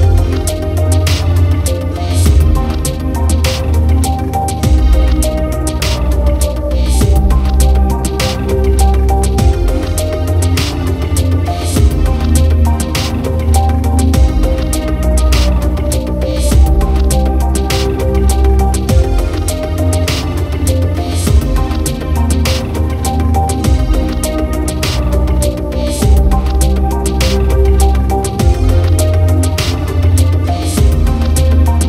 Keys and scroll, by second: 7.0 ctrl+t, 20.2-23.0 typing, 24.9 typing, 29.0-30.6 typing.